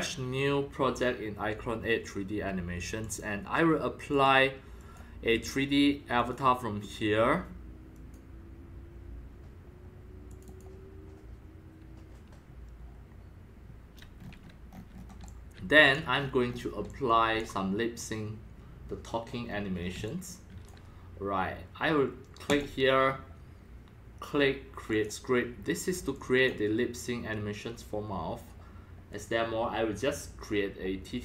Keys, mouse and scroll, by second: 3.0 click, 4.1 click, 4.8 click, 6.2 click, 7.9-9.7 drag, 10.3 click, 10.4 click, 13.1 scroll up 1, 14.2-14.9 scroll up 9, 14.9 middle click, 14.9 scroll down 3, 15.2 x, 15.3-15.9 drag, 15.5 c, 16.2-16.6 scroll up 11, 16.8 x, 16.8-18.1 drag, 17.3 c, 19.4 scroll up 3, 19.9-21.0 typing, 20.0-20.6 drag, 22.9-23.8 drag, 23.9 click, 24.1 drag, 24.9 click, 26.1 click, 26.8-31.0 drag.